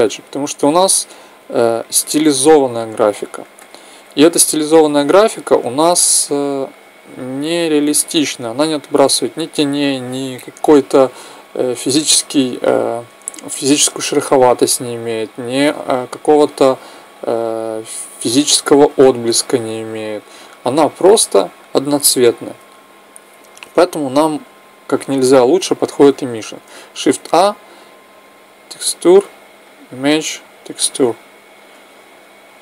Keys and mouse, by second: 1.2-3.1 drag, 3.4-5.8 middle drag, 6.2-8.0 drag, 8.3-10.3 drag, 26.8 shift+a, 31.5-32.6 drag.